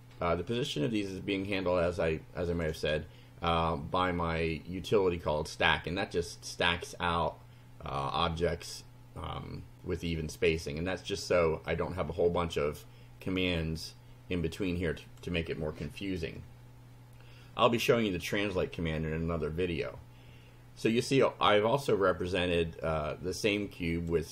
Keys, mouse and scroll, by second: 1.9 click, 11.2 scroll down 1, 12.3 scroll up 2, 15.1 click, 15.9 scroll down 2, 16.5 scroll down 2, 22.3-24.3 drag.